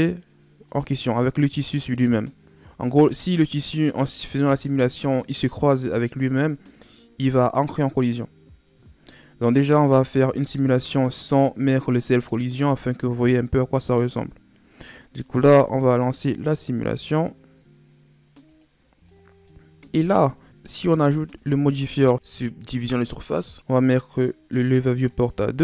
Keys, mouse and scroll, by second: 0.6-3.6 middle drag, 16.3-19.0 drag, 19.0-19.9 middle drag, 19.9-20.3 scroll down 4, 20.3 scroll up 1, 21.2 click, 22.3-23.5 drag, 23.5 scroll up 2, 25.0-25.6 drag.